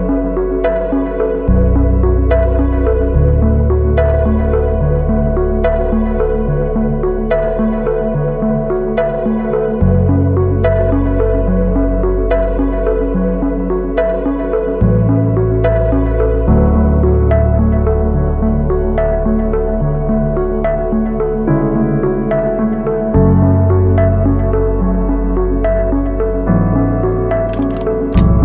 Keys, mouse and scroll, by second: 9.3-10.3 ], 12.7 double click, 12.9 ], 13.3 ], 14.0 ], 24.0 double click.